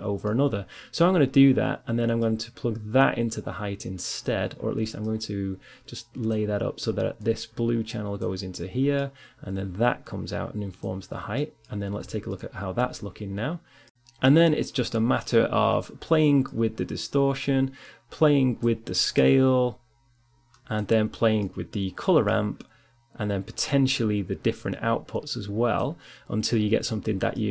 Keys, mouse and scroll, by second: 1.3-3.4 drag, 4.6-6.6 drag, 7.2 click, 7.4-8.9 middle drag, 9.1 middle click, 10.0 click, 10.6 middle click, 11.8-12.8 middle drag, 12.8 click, 17.0 click, 18.8-20.6 drag, 22.2 middle click, 22.4-25.8 drag.